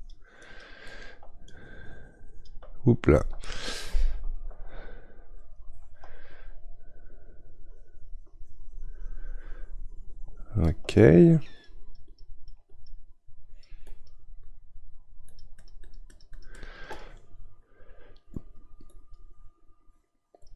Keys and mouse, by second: 0.9 middle click, 1.4-4.5 drag, 4.5 ctrl+z, 6.3-9.4 shift+drag, 11.4-20.5 drag.